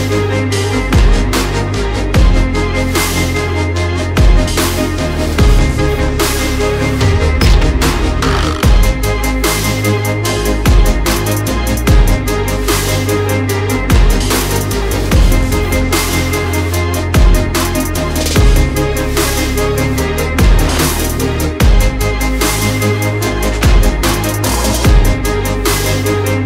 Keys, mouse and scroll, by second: 1.7 click, 2.6 click, 4.0 click, 6.3 click, 6.5 click, 8.3 click, 10.8-12.4 typing, 13.1 Return, 16.7 alt+click, 17.4-20.4 typing, 20.1 click, 22.4 space, 22.7 space, 23.3 space, 24.8 click, 25.9-26.4 scroll.